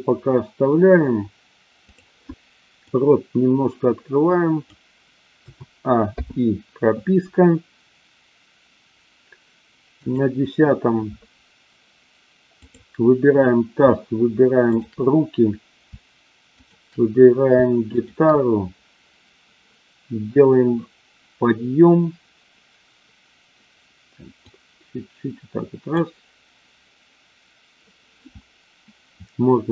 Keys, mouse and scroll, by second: 1.8 click, 2.7-4.6 drag, 5.5 a, 6.1 i, 10.0 click, 12.6 click, 14.6 shift+click, 16.6-17.1 shift+drag, 17.9 shift+click, 24.5 click.